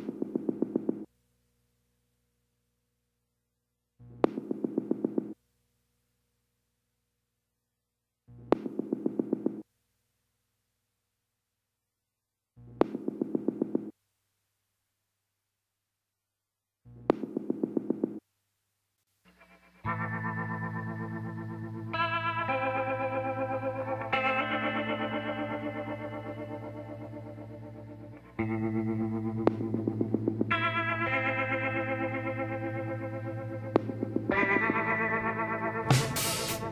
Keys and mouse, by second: 1.5-2.8 middle drag, 2.8 click, 2.8 r, 4.8-6.6 drag, 8.8 z, 9.3-11.2 drag, 13.6 KP_7, 14.8 s, 19.5 middle click, 23.3 KP_1, 27.0-30.4 drag, 28.2 z, 29.2 z, 30.6 click, 32.1-35.9 drag.